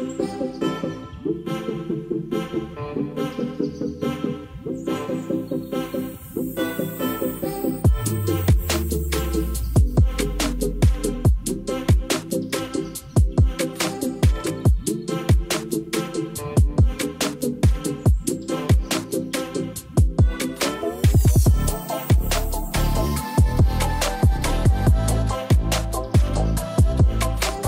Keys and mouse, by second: 0.0 ctrl+s, 2.0-2.5 drag, 2.9-3.6 drag, 7.5 click, 8.7 ctrl+s, 10.1 middle click, 10.2 click, 11.0-12.0 drag, 15.7 shift+a, 18.1 g, 18.3 z, 19.7 click, 19.9 s, 22.5 click, 23.5-24.9 drag, 24.4 0, 25.6 ctrl+s, 26.1 middle click, 27.1 shift+d, 27.3 y.